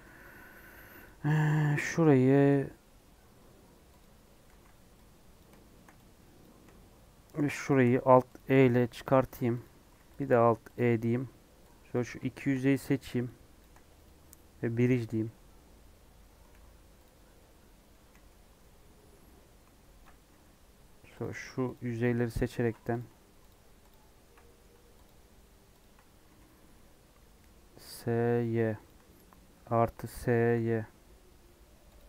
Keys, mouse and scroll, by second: 0.3-1.0 scroll up 1, 1.0 alt+click, 4.0 click, 4.5 alt+z, 5.4 click, 6.4 click, 7.7 shift+click, 8.3 alt+e, 10.2 alt+e, 11.9 click, 12.2 shift+middle click, 12.4-12.8 shift+scroll up 4, 13.6 shift+click, 14.9-16.0 right drag, 16.0 Tab, 16.5 alt+z, 17.0 click, 17.2 scroll down 2, 17.3-18.4 middle drag, 18.4 Tab, 18.6-21.2 middle drag, 21.2 click, 21.7 ctrl+click, 22.9 click, 23.5 ctrl+click, 23.9 ctrl+click, 24.4 middle click, 25.0 ctrl+click, 25.8 ctrl+click, 26.1 ctrl+Left, 26.2 s, 29.4 ctrl+KP_Add, 30.2 s.